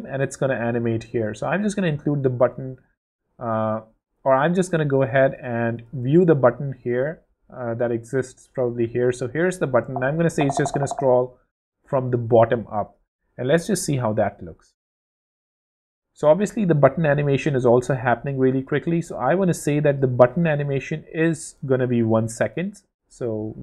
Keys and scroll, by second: 1.2 space, 3.5 super+z, 9.8 shift+space, 13.4 w, 15.3 w.